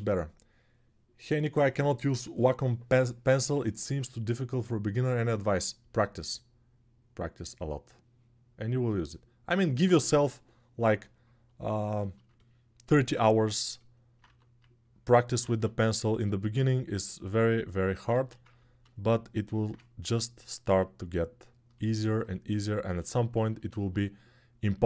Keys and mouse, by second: 14.0 1, 15.2 ctrl+z, 17.8 alt+q.